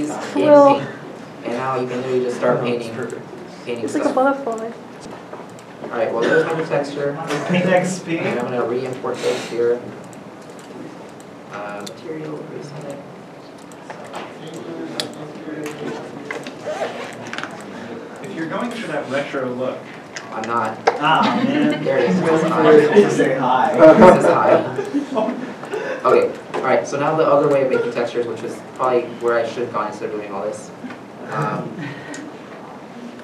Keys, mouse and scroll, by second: 6.4 Return, 6.6 alt+Tab, 16.7 alt+Tab, 16.7 right click, 16.8 right click, 19.6 w, 20.9 s, 21.4 s, 21.8 w, 25.0 right click, 25.5 right click, 25.8 w, 26.8 alt+Tab, 28.1 alt+Tab, 28.1 alt+Tab, 29.9 alt+Tab, 30.2 middle click, 31.0 middle click.